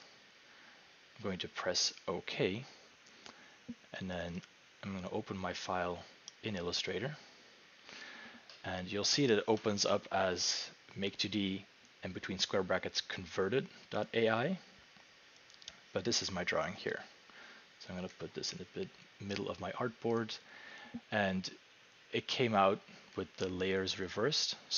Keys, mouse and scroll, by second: 0.1 click, 4.3 click, 4.5 click, 16.9 click, 19.3 click, 20.2 click, 24.5 click.